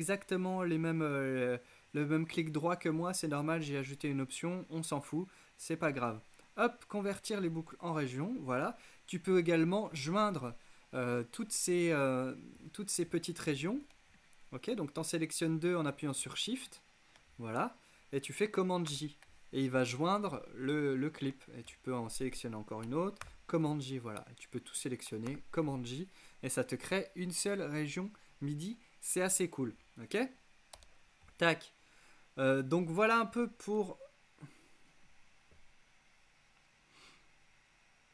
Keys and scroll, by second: 18.9 super+j, 23.3 shift+super+j, 25.4 super+j, 30.8 BackSpace.